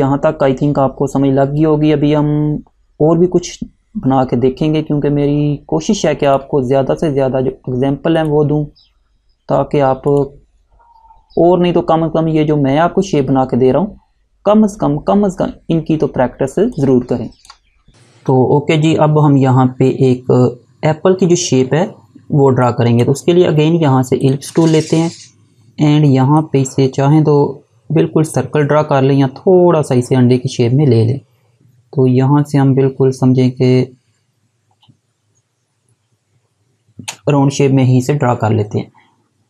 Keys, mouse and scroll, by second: 6.4 click, 16.2 space, 16.9 click, 17.0 space, 22.9 Delete, 24.2 click.